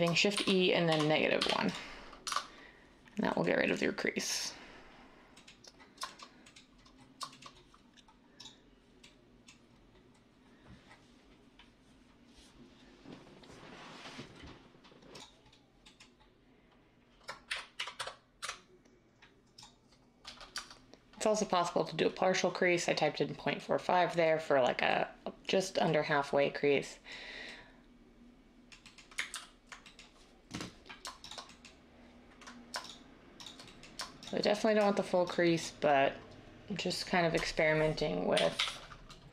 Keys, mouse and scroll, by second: 0.3 e, 0.8 -, 1.4 1, 2.2 Tab, 17.4-18.4 typing, 20.5 Tab, 29.3 ctrl+z, 38.3-39.3 typing.